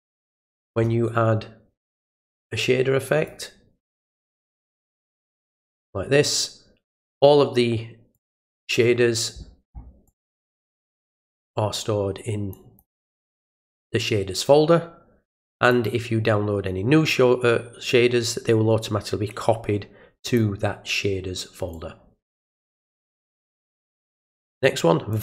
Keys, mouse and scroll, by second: 2.2-3.3 drag, 4.3 click, 5.5 click, 8.1 click, 10.1 click, 12.5 click, 12.9 click, 13.1 click, 15.7 click, 20.3 click, 21.7-22.4 drag, 23.2 click, 25.1 click.